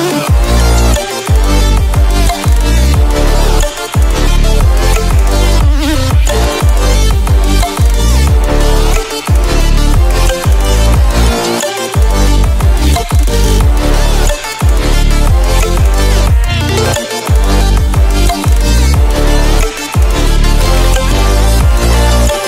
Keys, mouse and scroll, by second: 0.0 v, 0.5-1.5 drag, 6.5-8.1 alt+shift+drag, 8.5 right click, 9.5 click, 11.9 g, 13.7-15.3 drag, 18.5-19.1 click, 19.9-20.5 click, 21.4-21.9 click.